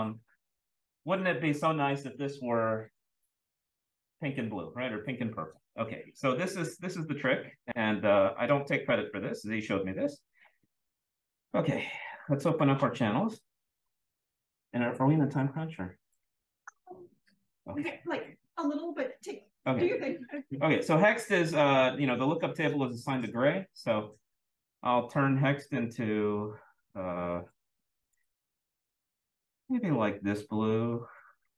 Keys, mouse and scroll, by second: 0.7-6.9 scroll up 1, 6.9-7.9 scroll up 1, 8.3-9.0 drag, 9.2-10.3 drag, 12.4 click, 23.0 click, 24.5 click.